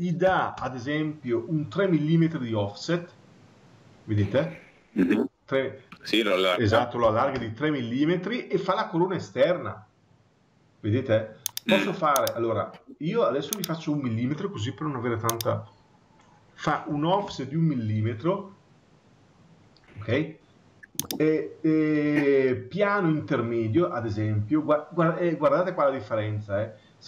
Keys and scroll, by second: 0.4 Return, 7.3 Return, 17.1 Return.